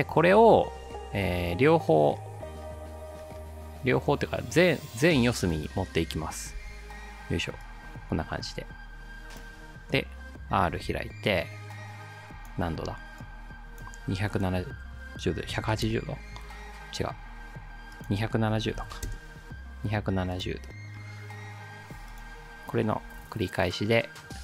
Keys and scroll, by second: 6.5 ctrl+d, 10.7 r, 15.2-16.1 typing, 18.3-19.4 typing, 23.0 ctrl+d.